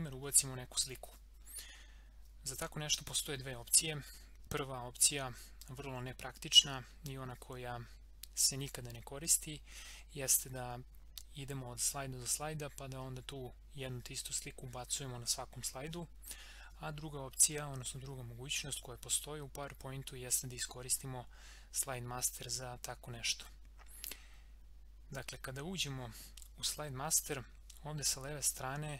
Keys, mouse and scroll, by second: 28.5-28.9 drag.